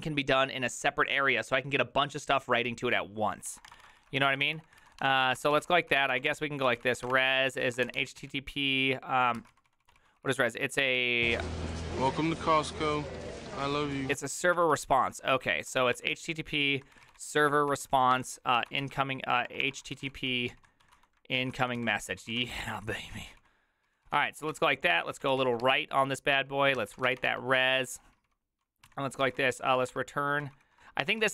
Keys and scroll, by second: 3.9-11.4 typing, 11.8 ctrl+c, 15.4-31.3 typing, 26.8 Tab.